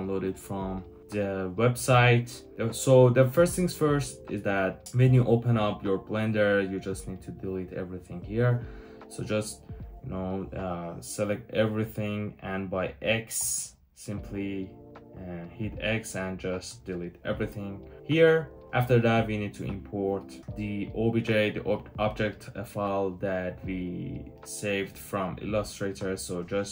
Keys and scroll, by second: 13.3 x.